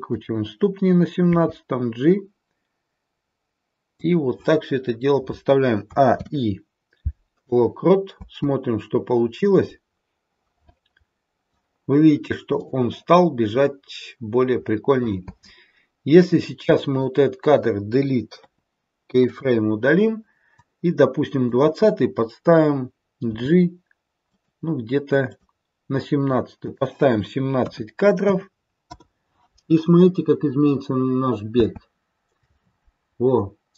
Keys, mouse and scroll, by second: 1.2 g, 5.8 a, 6.0 i, 8.1 space, 12.5 click, 13.3-15.2 scroll down 2, 15.2 space, 16.2 click, 18.3 Delete, 20.6 click, 23.1 g, 25.2 click, 26.5 click, 31.4 space.